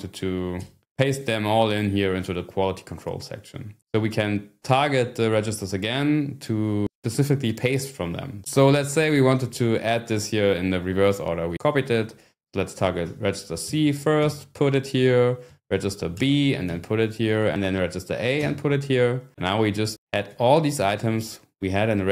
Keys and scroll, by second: 0.6 scroll down 1, 13.1 ", 13.6 c, 14.2 p, 15.4-18.4 typing, 20.3-21.0 scroll up 3, 21.0 Down, 21.9 scroll down 1.